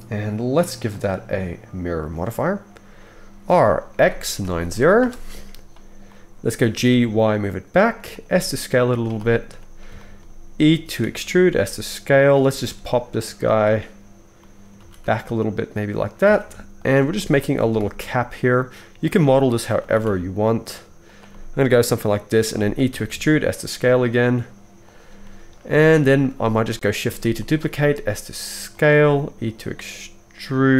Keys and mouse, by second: 0.4-0.9 drag, 3.5 r, 6.6 g, 6.9-8.2 drag, 6.9-8.2 middle drag, 6.9-10.1 right drag, 8.3 s, 10.1-13.5 drag, 11.0 e, 12.4 g, 13.5-16.1 middle drag, 14.8 g, 16.3 alt+a, 16.8 shift+click, 16.8 shift+a, 17.6 e, 19.6-22.9 middle drag, 19.8 g, 22.9 e, 25.6 shift+middle click, 26.1 middle click, 27.0 shift+d, 27.7 s, 29.0 middle click, 29.2-30.7 middle drag, 29.4 e.